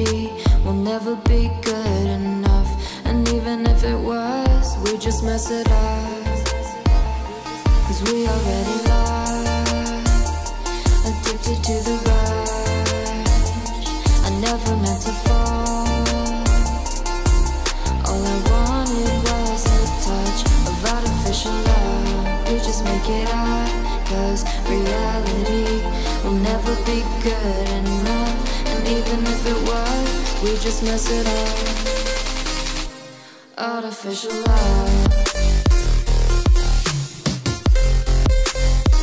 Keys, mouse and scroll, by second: 0.0-1.9 typing, 2.0 Left, 2.2 Return, 2.3 Down, 2.4 Right, 2.6 Left, 2.9 Up, 3.7-6.5 typing, 6.6 Left, 7.1 Down, 7.9 Return, 8.1-8.6 scroll down 1, 9.0 ., 9.7 Return, 10.6-25.2 typing, 12.9 click, 13.5 Return, 16.0 Right, 20.4 Right, 20.6 ctrl+s, 21.0 Return, 26.3 Right, 26.5 Left, 26.8 Right, 27.4 Delete, 28.4 Delete, 29.5 Delete, 29.7 Left, 29.9 Right, 30.0 Delete, 31.0 ctrl+s, 31.9 Right, 32.2 Return, 32.8 click, 33.0 scroll down 1, 33.4-36.0 typing, 36.0 scroll up 1, 36.9 click, 37.1-39.0 typing.